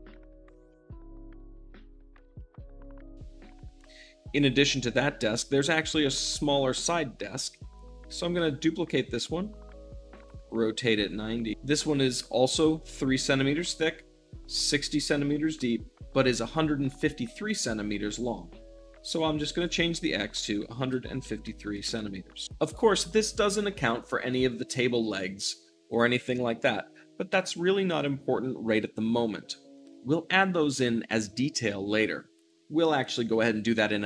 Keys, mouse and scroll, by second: 0.1 middle click, 0.3 click, 0.4 `, 0.6-2.1 middle drag, 2.1-7.5 drag, 8.0 shift+d, 8.7 click, 8.9 r, 10.0-20.3 ctrl+drag, 10.3 g, 20.3 1, 21.7 c, 21.8 m, 21.9 Return, 22.4-34.0 middle drag.